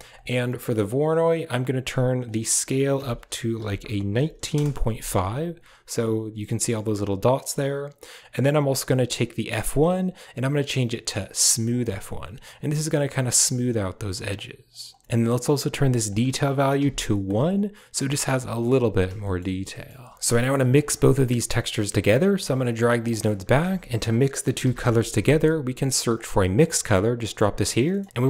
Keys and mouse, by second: 2.1-4.4 drag, 7.2 drag, 9.3-11.6 drag, 14.2 click, 14.8 click, 15.9-17.2 drag, 19.1 shift+middle click, 19.6 middle click, 20.2 middle drag, 20.7 drag, 21.6 click, 22.8 g, 23.1 click, 23.3 shift+a, 26.8 click, 27.8 click.